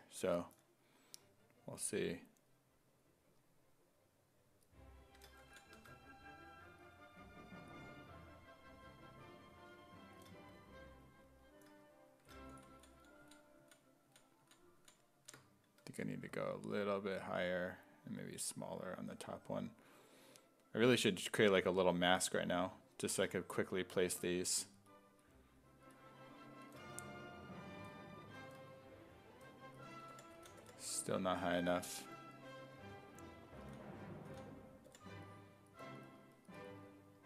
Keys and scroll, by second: 5.8 1, 12.8 ctrl+z, 13.0 ctrl+z, 13.3 ctrl+z, 14.1 ctrl+z, 14.5 ctrl+z, 14.8 ctrl+z, 15.2 ctrl+z, 15.9 1, 29.5-31.1 typing, 33.6 s, 34.3 s, 34.9 5.